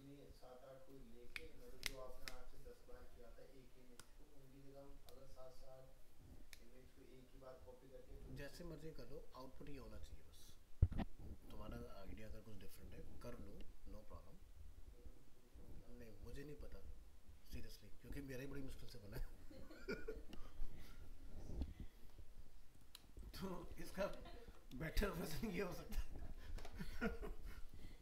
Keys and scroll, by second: 24.1 ctrl+-.